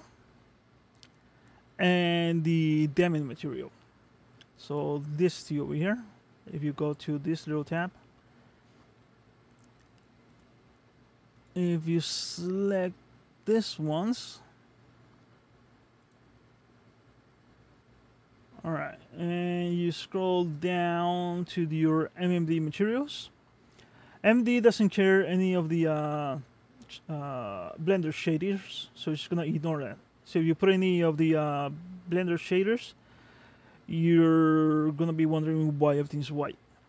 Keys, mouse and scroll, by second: 1.9 middle click, 4.7 click, 5.3 click, 10.3 click, 11.4 click, 12.0 middle click, 16.1 click, 17.8-19.0 scroll down 8, 19.1-19.9 scroll down 2, 19.9-23.2 scroll down 7, 24.2-28.0 scroll up 17, 29.1 click.